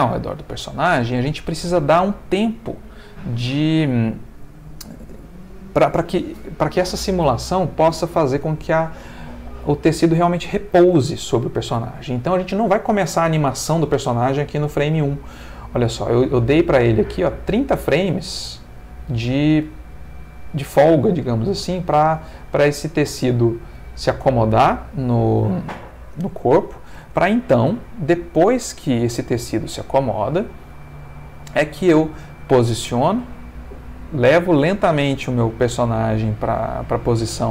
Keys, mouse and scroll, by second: 1.1 ctrl+shift+middle click, 12.8-14.2 drag, 15.8-26.9 drag, 27.0 space.